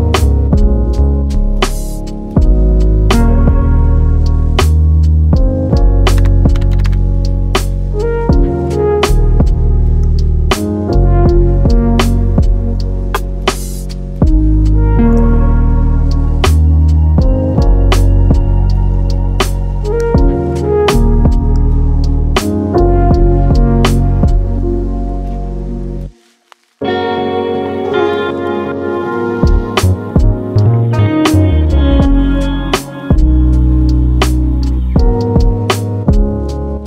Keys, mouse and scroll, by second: 0.3-6.2 drag, 8.4 middle click, 8.4 shift+a, 9.7 shift+a, 10.2-11.6 scroll up 3, 11.6 scroll up 1, 11.8 click, 12.2 s, 15.2 g, 17.5-18.4 middle drag, 19.4 middle click, 20.6 middle click, 21.6 ctrl+r, 24.0 click, 25.6 shift+d, 26.7-27.8 middle drag, 31.2 click, 32.0 shift+d, 33.5 e, 36.0-36.8 middle drag.